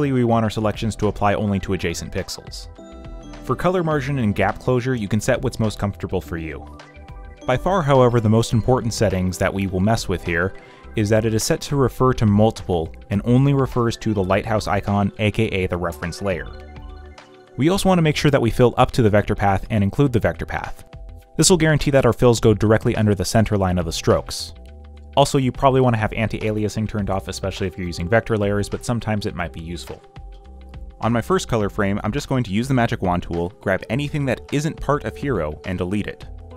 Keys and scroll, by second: 31.0-32.7 typing, 34.4-36.5 typing.